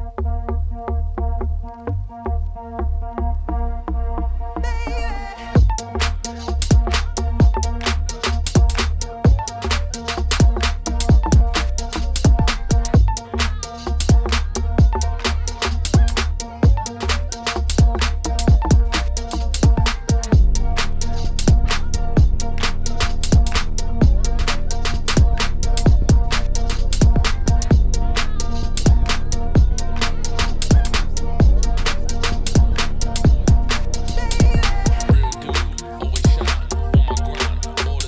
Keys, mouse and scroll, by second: 4.3-5.1 scroll up 1, 5.1 click, 5.6-8.6 drag, 9.0 click, 10.4 click, 10.9 ctrl+s, 11.6 click, 12.3 click, 14.5-16.5 drag, 16.7 ctrl+s, 18.2-18.6 scroll down 1, 18.8 click, 19.6 click, 34.7 z, 34.8 ctrl+s, 36.5 click.